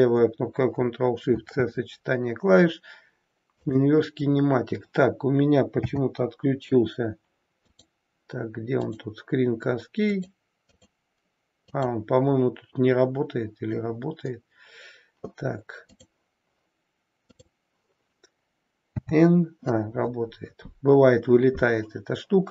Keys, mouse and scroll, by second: 18.9 n.